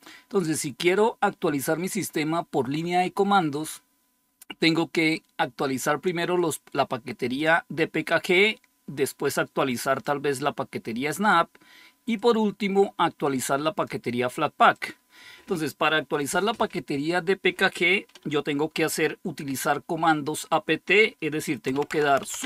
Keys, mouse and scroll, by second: 6.2-7.8 drag, 9.9-11.4 drag, 12.0-14.5 drag, 14.6 click, 21.4-22.4 typing.